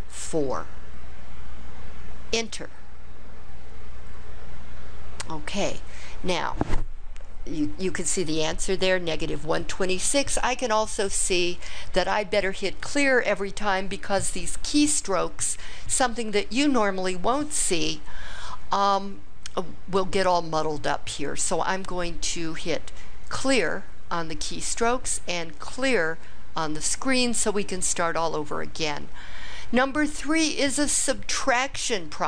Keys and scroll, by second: 0.1 4, 2.3 Return.